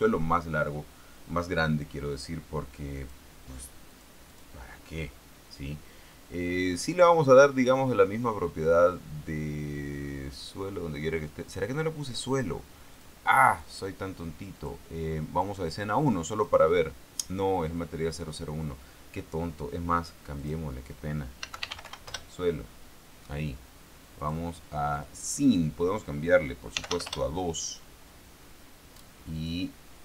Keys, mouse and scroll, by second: 3.3 click, 4.3 click, 4.7 click, 13.3 click, 14.9 click, 15.7 click, 16.8 right click, 20.7 click, 21.8 s, 21.9 u, 22.0 e, 22.2 o, 22.4 Return, 24.5 click, 25.3 click, 25.8 click, 27.1 d, 27.2 s, 27.4 Return, 29.7 click.